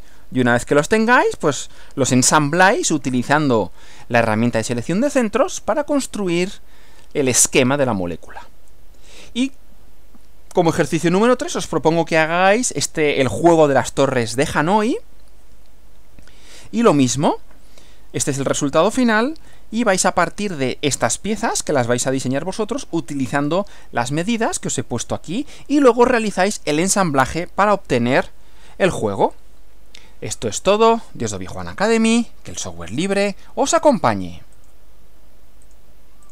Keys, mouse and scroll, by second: 4.4 Left, 8.7 Right, 19.5 Right, 34.6 click, 35.7 click, 36.2 click.